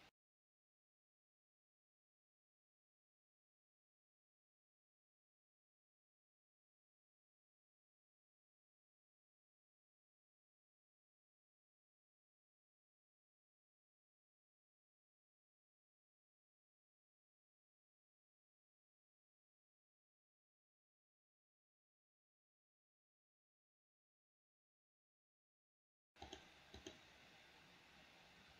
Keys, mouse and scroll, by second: 0.7 g, 2.6-5.4 drag, 5.8-7.7 middle drag, 8.4 middle click, 11.1-22.2 drag, 25.9 click, 27.1 click.